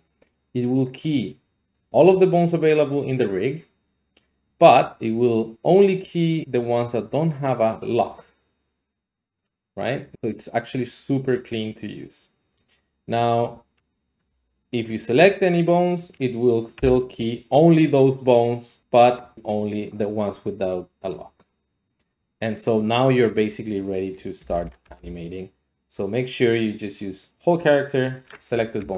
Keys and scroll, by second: 14.2 x, 16.7 i, 24.4 a, 24.6 a, 24.8 x, 28.6 Escape, 28.6 typing.